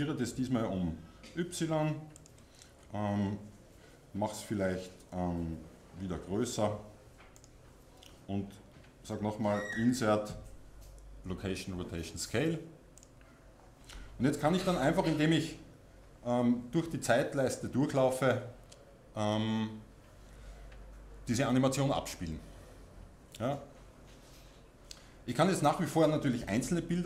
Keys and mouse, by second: 2.3-6.1 drag, 6.1 s, 7.4-9.3 drag, 9.7 1, 14.7-17.1 drag.